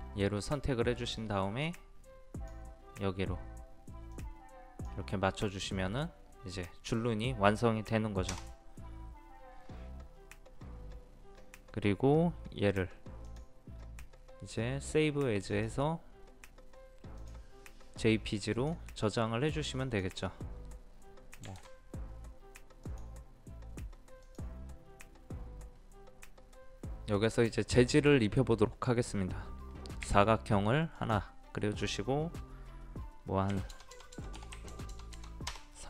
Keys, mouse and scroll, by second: 21.2-22.1 typing, 22.9 click, 27.0 middle click, 30.0 r, 31.0 click, 33.5 KP_3, 33.7 KP_0, 34.6 KP_3.